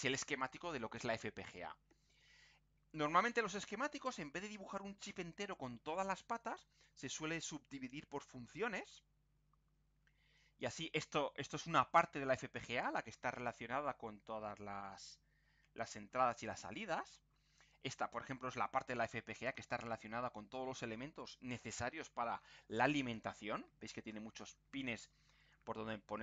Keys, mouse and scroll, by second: 9.0-10.2 scroll up 4, 10.4 scroll down 2, 17.0-17.5 scroll down 2, 18.0-18.8 scroll up 2, 19.1 scroll down 2, 20.1 scroll down 2, 20.5 scroll up 2.